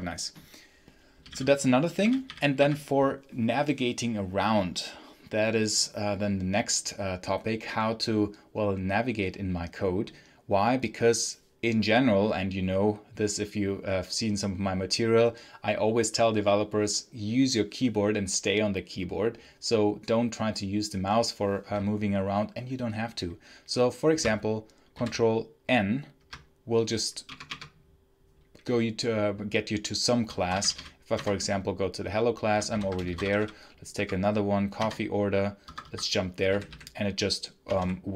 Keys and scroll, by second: 0.8-2.4 typing, 24.8 ctrl+n, 27.1 BackSpace, 30.0-31.0 typing, 31.0 Return, 32.6 ctrl+n, 32.7-33.9 typing, 34.6 Return, 35.5 Escape, 35.9 Escape, 36.4-38.1 typing.